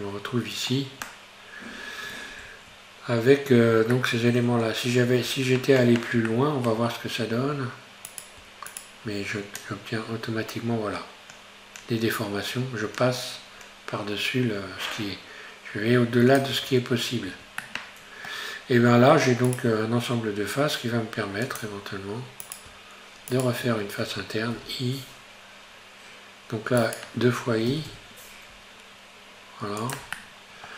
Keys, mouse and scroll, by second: 4.0-5.0 middle drag, 5.0-5.3 scroll up 2, 5.3 Tab, 6.0 Tab, 6.3-7.5 shift+middle drag, 7.5-8.1 scroll up 2, 8.1 right click, 9.6-12.7 drag, 16.6 Tab, 17.0-17.3 scroll down 4, 17.3 Tab, 17.7-19.5 middle drag, 19.5 right click, 21.5-22.5 drag, 22.5-23.5 right drag, 24.7 i, 27.8 i, 30.2-30.7 middle drag.